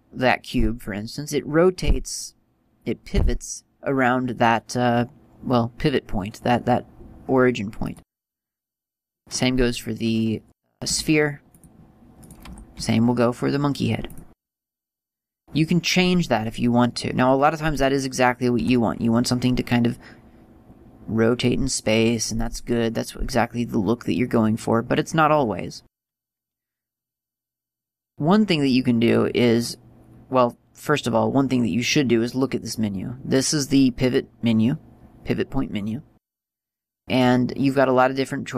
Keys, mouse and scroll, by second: 8.1 click, 9.3 right click, 11.1 r, 11.8 click, 12.4 right click, 12.7 r, 14.3 click, 17.9 right click, 18.8 r, 22.6 click, 28.0 click, 29.3 click, 32.5 click, 34.2 click.